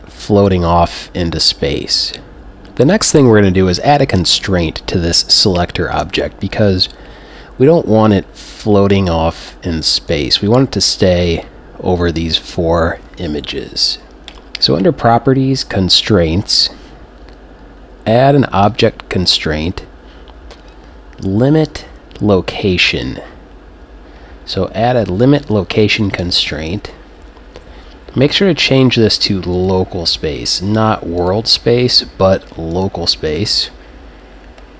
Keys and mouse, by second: 6.1 g, 10.2-15.9 drag, 14.2 alt+g, 18.6-20.5 drag, 28.2-30.6 drag, 31.2-33.5 drag.